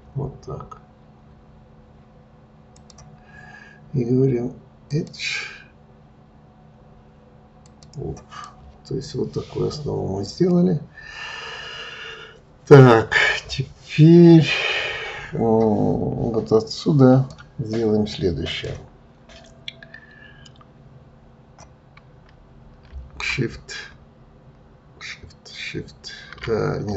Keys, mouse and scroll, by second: 4.8-7.9 drag, 8.4-11.5 middle drag, 17.7-18.4 scroll, 18.4 click.